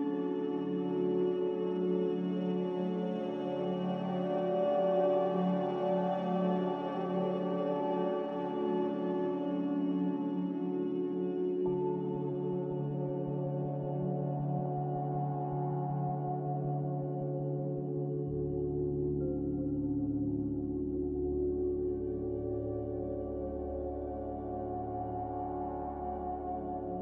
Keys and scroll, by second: 0.0-0.2 typing, 2.3 BackSpace, 2.6 0, 2.9 Return, 3.6 z, 11.6 b, 14.3 z, 15.9 Return, 23.7 z.